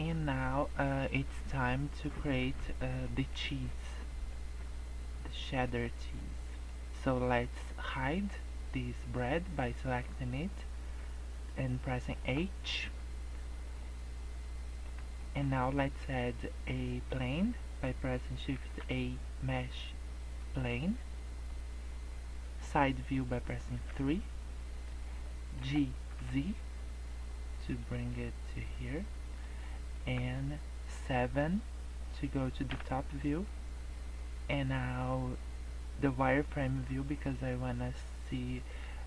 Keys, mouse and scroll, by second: 0.3 middle click, 2.4 middle click, 2.9 scroll down 2, 3.1 middle click, 3.4 scroll up 2, 3.8 middle click, 4.3 middle click, 6.1 middle click, 9.9 click, 12.1 h, 13.6 middle click, 15.2 middle click, 18.6 shift+a, 21.0 middle click, 23.7 KP_3, 25.5 g, 28.2 middle click, 29.6 middle click, 32.7 KP_7, 33.5-33.8 scroll down 4, 33.9 scroll up 2, 34.7 scroll down 1, 35.5 scroll up 1.